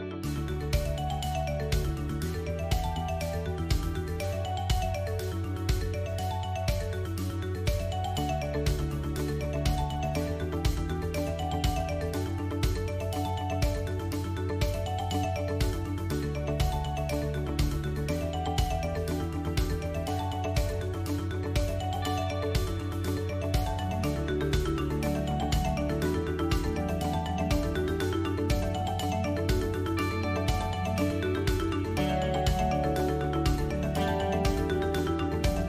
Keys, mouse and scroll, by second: 0.2 KP_7, 1.9 shift+middle click, 2.4 middle click, 4.7 middle click, 5.5 Tab, 6.0 click, 6.3 Tab, 6.7 click, 7.5 click, 8.4 ctrl+z, 8.8-9.2 scroll up 2, 9.2 shift+middle click, 11.6 ctrl+KP_Add, 12.5 f, 13.5 click, 15.3 s, 17.3-18.0 scroll down 1, 18.0-19.1 scroll down 1, 19.1 middle click, 20.4 middle click, 22.7 KP_1, 24.1 Tab, 25.0 shift+click, 26.5 shift+space, 28.7 click.